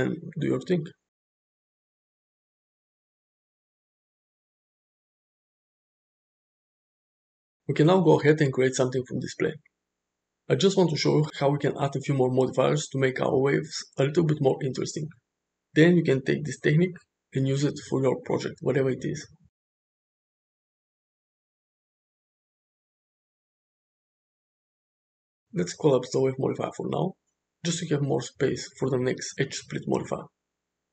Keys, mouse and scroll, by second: 1.9-5.6 drag, 6.3-8.1 drag, 8.9 space, 10.7-13.3 drag, 15.8-18.1 drag, 23.2 space, 24.0 shift+Left, 25.0 shift+Right, 29.1-30.2 drag.